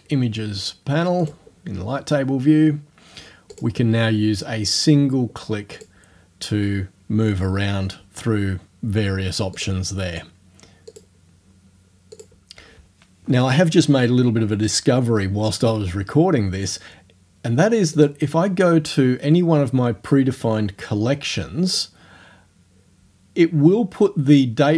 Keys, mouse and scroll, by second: 1.2 click, 3.5 click, 5.8 click, 9.6 click, 10.9 click, 12.2 click, 18.0 click, 21.7 click.